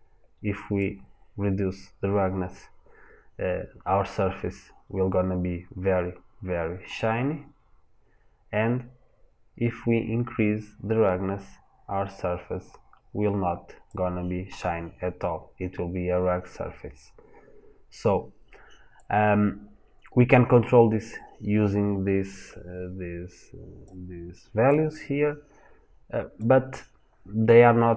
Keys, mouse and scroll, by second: 3.4-3.7 scroll up 1, 3.7-4.3 scroll down 1, 4.3-7.0 scroll up 1, 7.0 click, 19.0 click, 24.5 click.